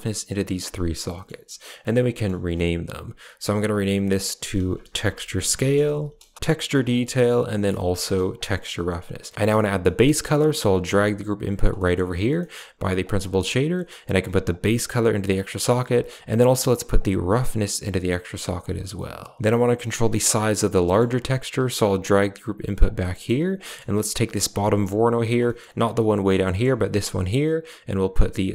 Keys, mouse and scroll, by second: 3.5-6.3 drag, 6.6 click, 6.7-8.3 drag, 9.3 g, 9.7 middle click, 10.7 g, 11.6 middle click, 12.2 middle drag, 12.9 click, 13.6 middle click, 14.4-14.9 drag, 15.2 click, 16.8-17.8 drag, 19.6 middle click, 20.1 click, 20.5 middle click, 21.6 g, 23.0 middle click, 23.5 middle click, 24.3 click, 25.3 middle click, 25.9 click, 26.3 middle click, 26.9 click.